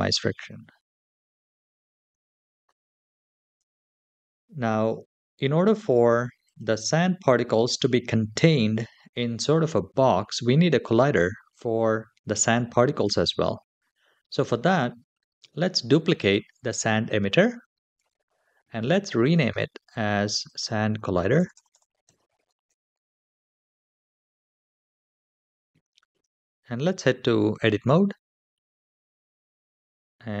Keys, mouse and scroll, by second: 3.3 /, 6.1 click, 16.2 shift+d, 18.9 click, 19.1-24.1 drag, 21.2 BackSpace, 21.4 BackSpace, 22.7 l, 25.8 Tab.